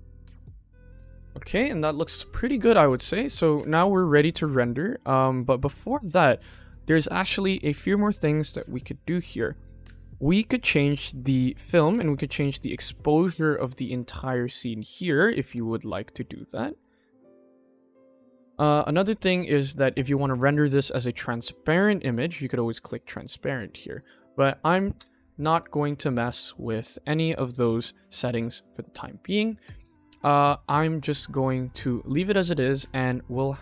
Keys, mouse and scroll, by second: 0.4 click, 0.9 click, 0.9 n, 2.7 ctrl+s, 3.1 click, 4.2 click, 5.7 click, 7.9-8.3 scroll down 3, 8.6 click, 8.9-9.8 scroll down 3, 9.8-10.7 scroll down 1, 12.0-14.8 drag, 14.9 click, 16.4 click, 16.7 KP_1, 17.3 click, 22.6 click, 23.7 click, 24.3 click, 25.7 ctrl+s, 27.8 click, 29.5-30.4 scroll down 3, 31.8 click.